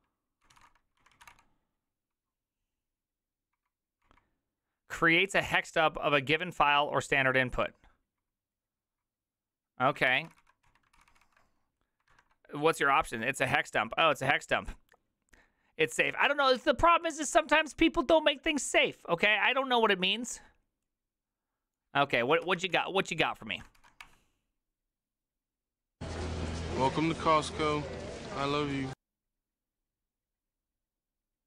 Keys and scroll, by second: 1.3 typing, 3.6 Return, 3.6 Down, 4.1 Down, 4.9-5.6 typing, 5.9 Down, 9.9-10.7 typing, 10.7 ctrl+c, 12.2 alt++, 22.9 ctrl+c, 22.9 alt+{.